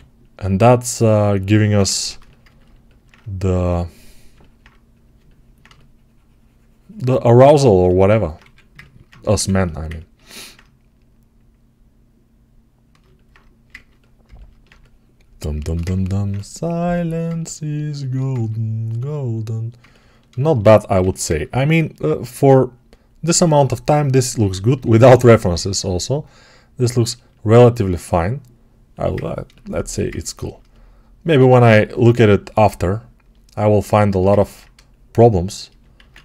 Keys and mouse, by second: 2.0-5.5 alt+right drag, 5.5-14.1 shift+drag, 8.3 2, 9.2 1, 14.1-16.5 ctrl+alt+right drag, 16.5-20.2 alt+drag, 20.2-36.2 alt+shift+right drag, 20.9 g, 35.8 alt+q.